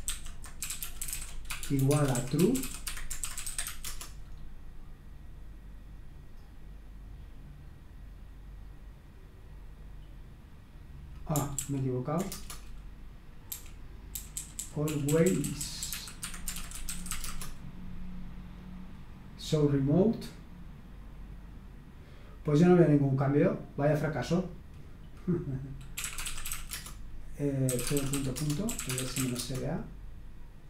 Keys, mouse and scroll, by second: 0.0-4.3 typing, 11.6 ctrl+p, 12.3 Return, 13.5-17.6 typing, 25.7-29.9 typing.